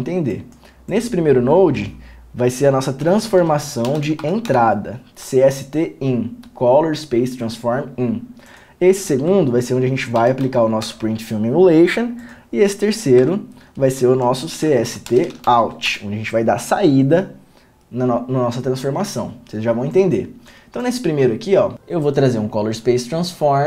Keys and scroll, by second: 2.0 alt+s, 3.3 c, 3.4 s, 4.1 space, 4.5 n, 4.7 Return, 9.5 Return, 9.6 Tab, 10.6 p, 10.7 f, 11.1 Return, 13.5 Return, 13.6 Tab, 14.8 Tab, 14.9-15.7 typing, 16.1 Return.